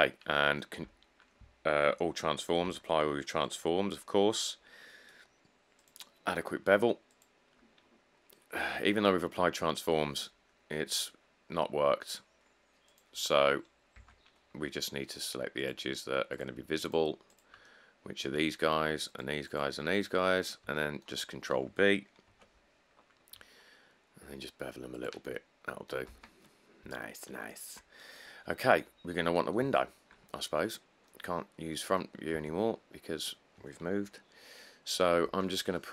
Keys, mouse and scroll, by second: 0.1 middle click, 0.2 middle click, 0.2 middle click, 1.0 q, 2.8 q, 8.3 middle click, 8.4 middle click, 8.5 middle click, 8.6 middle click, 14.2 Tab, 20.2 middle click, 20.2 middle click, 22.5 ctrl+b, 26.3 Tab, 26.6 middle click, 26.7 middle click, 26.9 middle click, 29.8 1, 32.5 Tab, 35.4 ctrl+r.